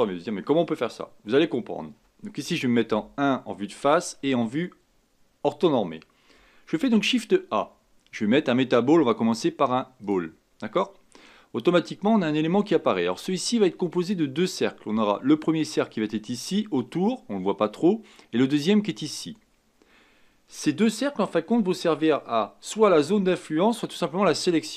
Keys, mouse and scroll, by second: 2.8 KP_1, 6.7 shift+a.